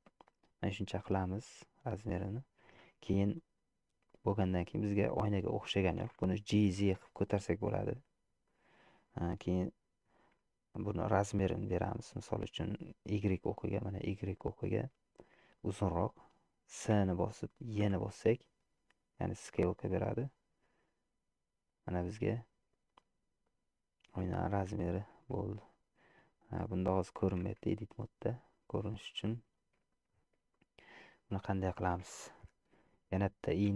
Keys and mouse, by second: 1.6 middle click, 3.5-6.0 middle drag, 6.8 g, 12.1-13.4 middle drag, 14.8 middle click, 15.7 middle click, 17.0 s, 24.3 middle click, 25.3 Tab, 26.3-27.4 middle drag, 27.7 Tab, 29.1 shift+click, 29.9 shift+click, 30.6 click.